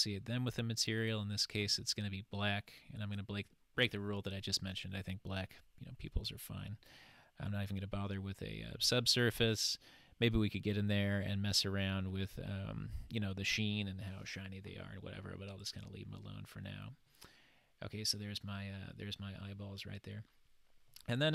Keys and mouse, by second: 1.1 click, 15.6 click, 17.1-18.1 middle drag, 20.9-21.3 middle drag.